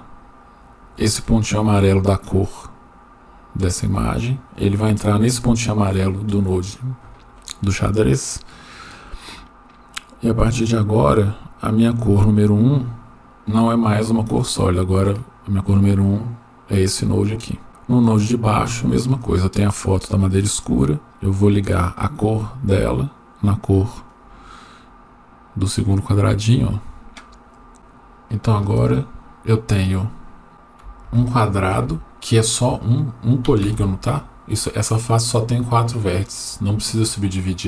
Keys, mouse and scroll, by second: 1.4 click, 2.1-9.0 drag, 15.1 click, 15.7-16.8 drag, 17.6 middle click, 18.2-18.9 drag, 21.1-24.1 drag, 27.6 scroll up 1, 28.8 click, 28.8 scroll up 2, 29.9 scroll down 1, 30.5-31.0 scroll down 1, 31.0 Tab.